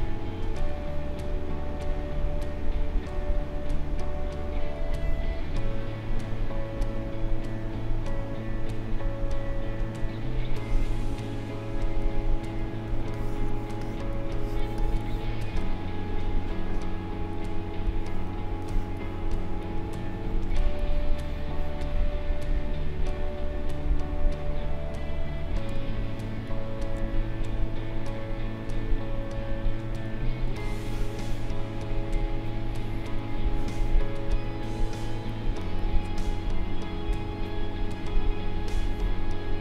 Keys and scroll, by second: 12.8 space, 18.2 space, 25.7 space, 30.5 space.